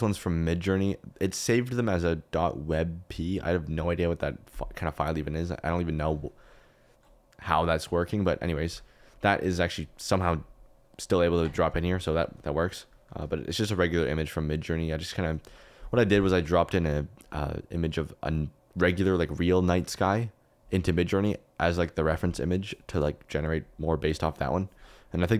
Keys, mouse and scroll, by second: 7.5 click, 8.1 click, 8.6 g, 14.2 click, 18.0 click.